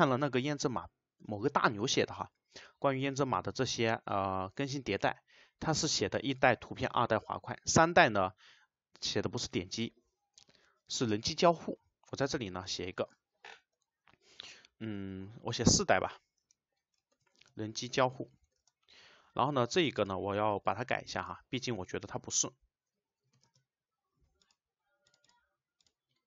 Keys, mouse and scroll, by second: 13.1 click, 16.4 space, 17.2 shift+;, 18.6 space, 20.0 click, 20.6 click, 22.3 BackSpace, 23.5 space, 24.4 click, 25.1 click.